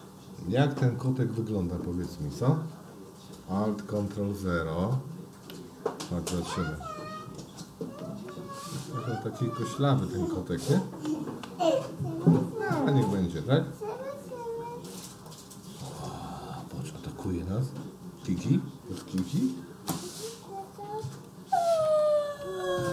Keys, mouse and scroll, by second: 1.1 Up, 1.5-4.3 Up, 6.4-7.4 middle drag, 8.3 ctrl+alt+KP_0, 12.4-13.2 drag, 15.3 shift+middle click, 18.8 g.